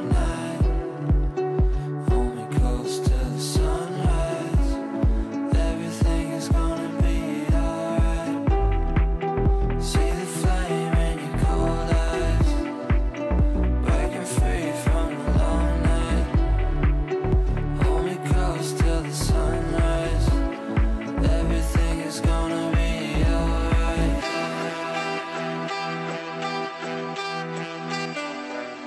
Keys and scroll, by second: 15.6 c, 19.0 c, 24.6 b.